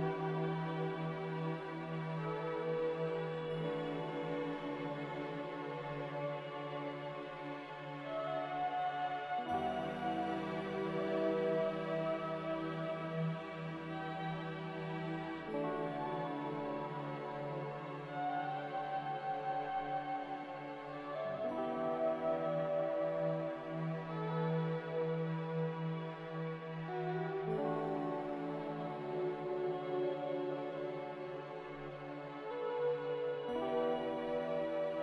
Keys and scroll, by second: 0.0-0.1 typing, 0.3 Return, 1.8-2.3 typing, 2.1 Return, 5.7-9.3 typing, 11.5 g, 16.3 z, 18.2 1, 18.6 Return, 18.6 0, 19.7 ctrl+c, 21.1 a, 22.1 a, 32.2 z.